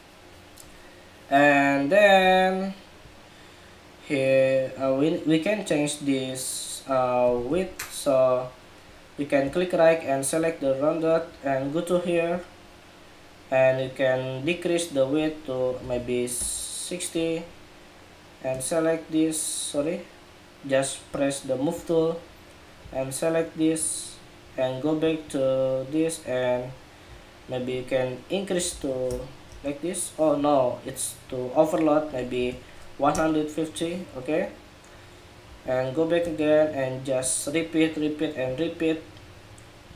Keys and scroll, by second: 7.2 super+=.